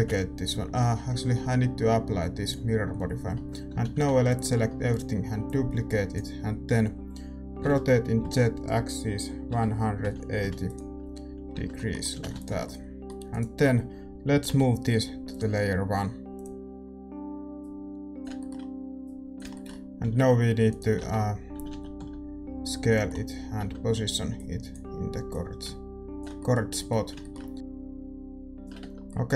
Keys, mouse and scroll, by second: 0.8 Tab, 2.4-4.8 drag, 3.3 Tab, 3.7 a, 3.9 a, 4.8 shift+d, 5.4-7.6 drag, 7.6 r, 11.4 scroll up 1, 11.7-13.3 middle drag, 12.1 a, 12.6 ctrl+s, 13.3-15.2 right drag, 15.2 m, 16.3-20.9 drag, 16.8-17.5 scroll up 1, 17.5 scroll up 1, 18.3-21.5 middle drag, 20.0 s, 20.9 Tab, 21.5 a, 21.6 a, 21.9 s, 22.8-24.3 middle drag, 23.5 Tab, 24.3-29.0 drag, 26.3-27.5 middle drag, 28.8 Tab, 29.0-29.3 middle drag.